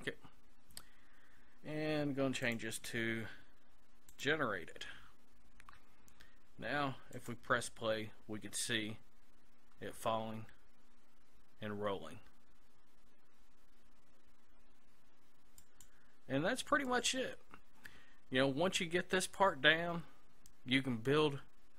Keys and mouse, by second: 0.0-1.2 drag, 2.5-4.3 drag, 7.2-9.1 drag, 15.6-21.3 drag.